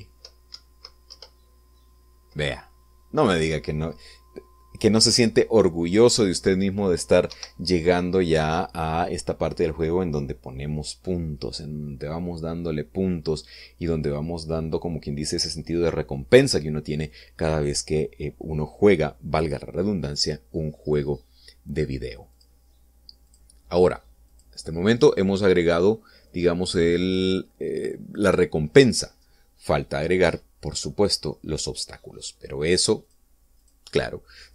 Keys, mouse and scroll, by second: 1.5 Right, 2.1 Left, 8.3 Escape, 23.4 click, 24.3 click, 25.3 click, 26.0 click, 27.3-29.4 drag, 34.1 click.